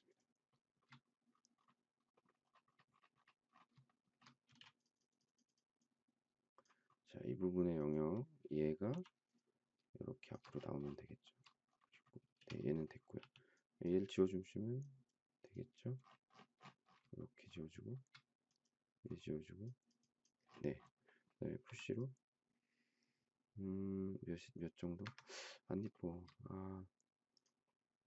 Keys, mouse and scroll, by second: 0.1 shift+click, 0.5 shift+middle click, 3.8 shift+middle click, 4.1 shift+scroll down 1, 4.4 space, 8.9 m, 10.2 shift+click, 11.0 shift+middle click, 12.2 space, 13.2 e, 17.1 shift+middle click, 18.0 shift+scroll up 1, 21.6 p, 24.9 Escape, 25.9 shift+middle click.